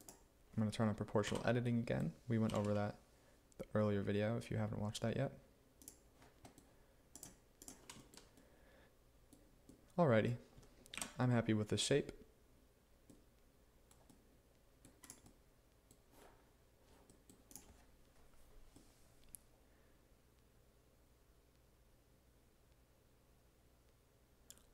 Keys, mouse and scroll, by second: 1.3 click, 2.5 g, 11.0-12.6 drag, 13.3-17.7 middle drag.